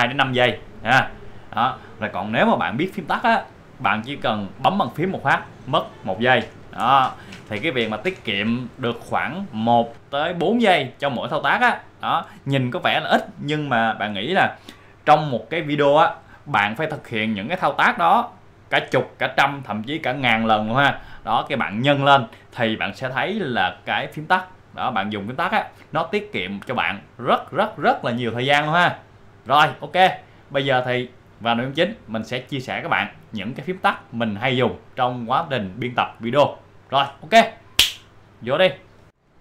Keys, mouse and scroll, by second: 0.8 right click, 2.1 click, 4.0 click, 6.4 shift+F12, 7.0 shift+F12.